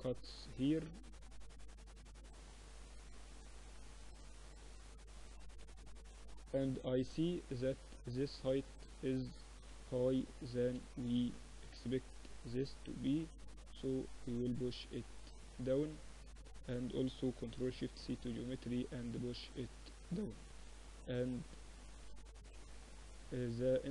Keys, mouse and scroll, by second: 1.4 ctrl+r, 3.7 Tab, 4.1 Tab, 4.4 Tab, 5.3 KP_1, 6.4 KP_3, 7.6-8.8 drag, 7.8 Tab, 9.3-10.9 drag, 9.4-11.4 typing, 13.0-14.8 drag, 15.0 Tab, 15.7-17.2 drag, 17.1 ctrl+alt+shift+c, 18.6-22.6 drag, 21.8 z, 22.6-23.9 middle drag.